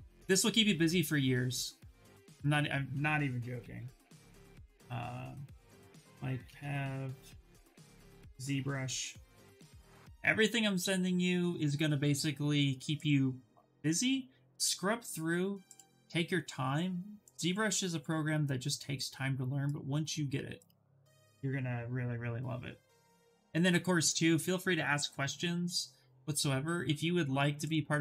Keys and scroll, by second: 3.0-3.9 typing, 5.3-9.8 typing, 21.3 ctrl+v, 21.7 Return.